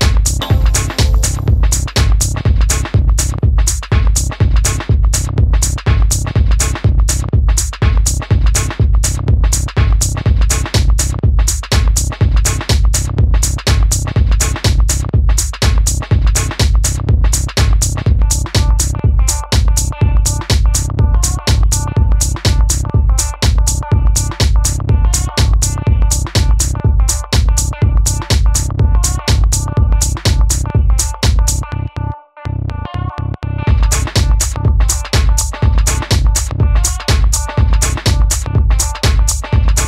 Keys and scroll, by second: 0.0-2.5 typing, 7.5 super+d, 8.1-10.6 typing, 11.6 typing.